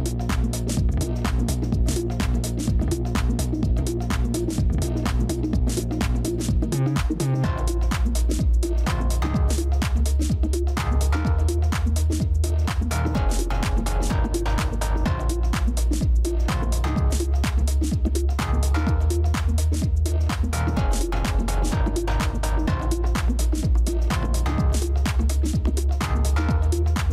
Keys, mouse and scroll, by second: 3.5 ctrl+[, 3.8 ctrl+[, 7.2 shift+click, 7.7 right click, 11.2 ctrl+z, 18.5 typing, 20.0 right click, 23.1 ctrl+z.